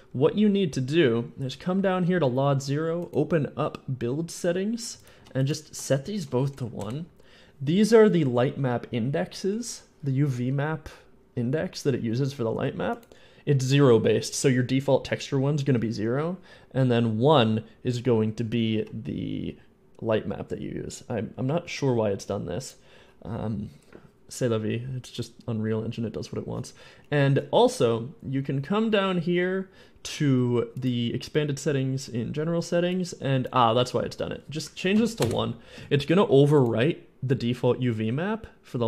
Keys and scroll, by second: 5.0 1, 5.9 1, 6.6 Return, 7.0 Return, 34.8 1, 35.0 Return, 35.0 1, 35.2 Return.